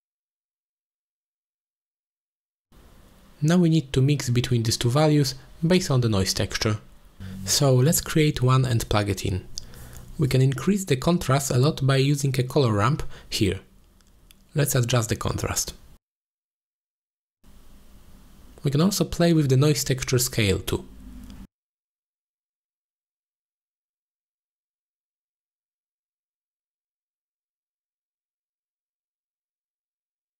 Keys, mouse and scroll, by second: 1.4 shift+a, 5.2-6.1 drag, 6.5-8.8 drag, 9.1 middle click, 9.8 click, 10.4 shift+d, 11.1 click, 13.7-17.5 drag, 15.5 r, 17.8 click, 18.4-19.1 drag, 19.5-20.7 drag, 22.3 ctrl+shift+click, 23.6 middle click, 24.0 middle click, 24.3-25.7 drag, 26.2 click, 27.8 x, 28.1 drag, 28.4 click, 28.9 BackSpace, 30.0 middle drag.